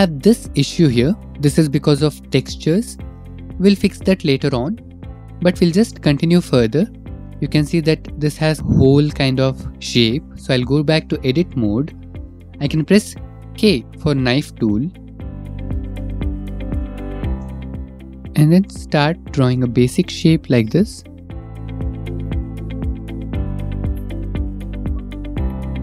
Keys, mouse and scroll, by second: 0.1 middle click, 1.3 middle click, 2.1 middle click, 3.6 middle click, 4.8 middle click, 4.8 middle click, 5.9-6.7 shift+middle click, 6.4 middle click, 6.7 middle click, 8.6 Tab, 9.8 middle click, 10.4 shift+middle click, 12.6 k, 14.4 middle click, 14.7 middle click, 17.9 click, 18.7 click, 19.3 click, 20.0 click, 21.3 click, 21.6 click, 22.1 click, 23.7 click, 24.1 click, 24.7 click, 25.1 click, 25.7 click.